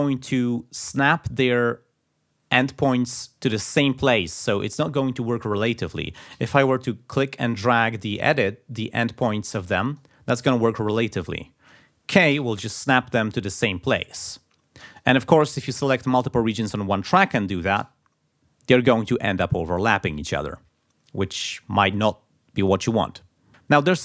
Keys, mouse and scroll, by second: 6.3 ctrl+z, 7.6-10.2 drag, 12.3 k, 13.9 k, 14.9 click, 17.8 k.